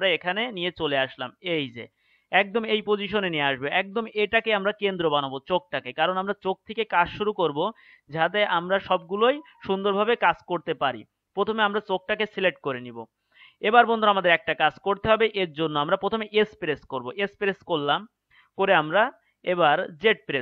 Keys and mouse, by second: 16.9 s.